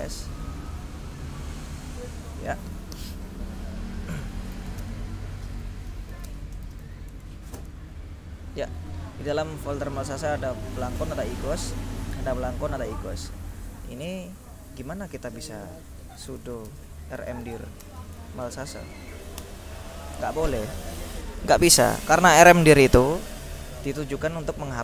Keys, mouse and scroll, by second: 0.0-0.5 typing, 4.4-7.4 typing, 7.6 shift+Return, 10.4-12.7 drag, 13.0 click, 14.3 click, 16.0-19.6 typing, 21.4 click, 22.7 click.